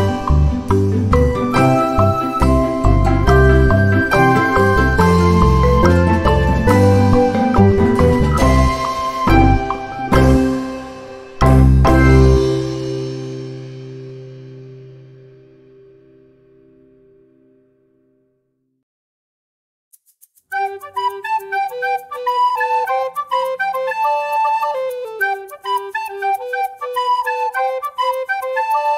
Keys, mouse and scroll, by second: 0.1 click, 1.2 click, 3.8-4.7 ctrl+scroll down 4, 5.2 ctrl+click, 6.3 d, 7.1 shift+click, 8.3 click, 8.9-9.6 ctrl+scroll up 4, 11.7-12.8 drag, 12.7 ctrl+z, 14.1 click, 15.0-16.8 drag, 17.7 click, 18.7 ctrl+d, 19.6 click, 20.8-21.3 ctrl+scroll down 2, 21.8-23.0 ctrl+drag, 23.6 ctrl+g, 24.7-25.8 drag, 26.9 ctrl+shift+click, 28.3 ctrl+d.